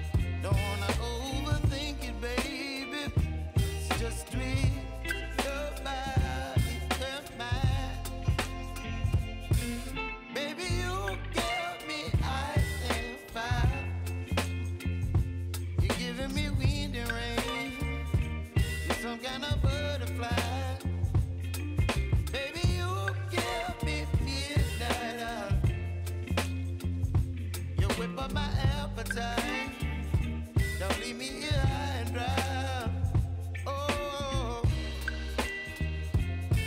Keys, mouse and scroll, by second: 0.2 click, 1.5-3.2 typing, 4.7-7.9 drag, 12.1 right click, 13.0 click, 15.6 ctrl+x, 16.7 click, 17.2 ctrl+shift+v, 17.7 click, 18.6-20.2 typing, 21.2 click, 25.9-27.6 typing, 29.8 click, 32.2-34.4 typing, 35.2 click, 36.2-36.6 typing.